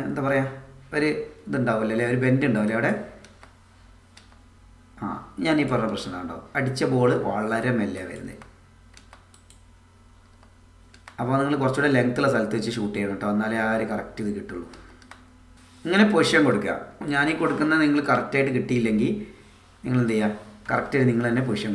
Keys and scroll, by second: 3.2 space, 5.9 space, 8.3 space, 10.3 space, 14.7 space.